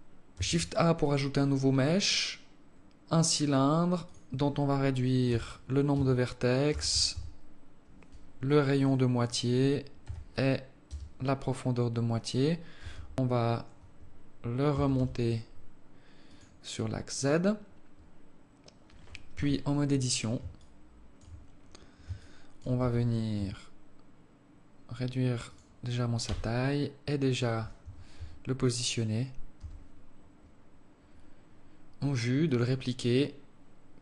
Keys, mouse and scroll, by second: 0.2 shift+a, 3.8 click, 8.9 click, 12.5 g, 14.5 g, 19.1 KP_7, 20.3 alt+shift+click, 21.3-21.9 scroll up 3, 21.9 alt+shift+click, 22.6 Tab, 23.1 s, 26.0 g, 27.9 Tab, 29.3 g.